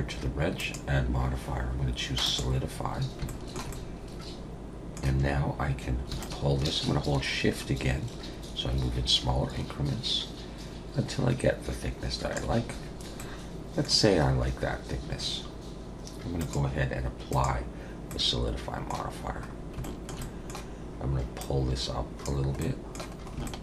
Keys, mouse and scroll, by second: 0.6 click, 2.8-3.3 scroll up 3, 3.3 shift+middle click, 6.2 shift+click, 13.2 middle click, 16.4 click, 18.1 middle click, 19.5 scroll down 2, 19.8 shift+middle click, 20.2 middle click, 21.4 click, 22.6 middle click, 23.2 scroll up 3, 23.4 shift+middle click.